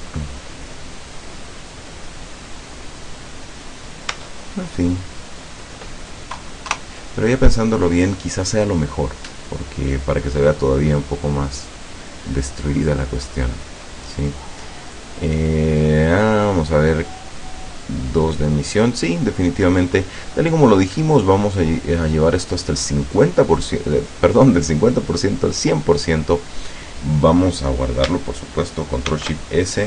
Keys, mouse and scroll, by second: 4.2 Tab, 5.3 scroll down 2, 6.7 KP_0, 14.9 right click, 16.4 click, 19.8 click, 20.5-20.9 scroll up 1, 24.9 click, 29.1 ctrl+shift+s.